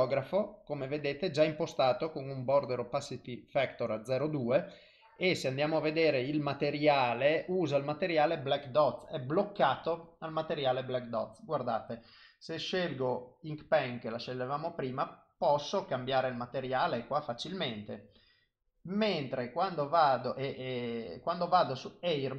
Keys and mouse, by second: 6.3 click, 11.7 click, 15.4 click, 16.2 click, 19.7 click.